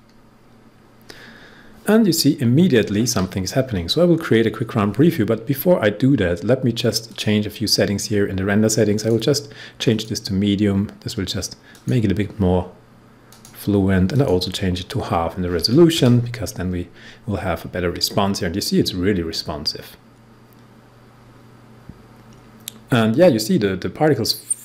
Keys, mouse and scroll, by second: 7.0 click.